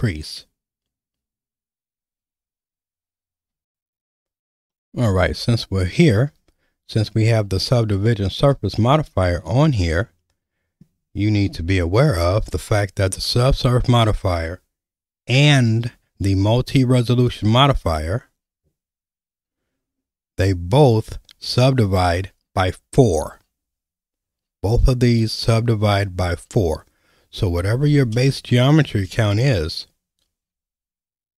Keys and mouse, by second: 3.9 alt+/, 4.7 middle click, 7.9 middle click, 8.8 shift+middle click, 10.0 middle click, 11.5 n, 17.3-26.5 drag, 28.3 shift+middle click.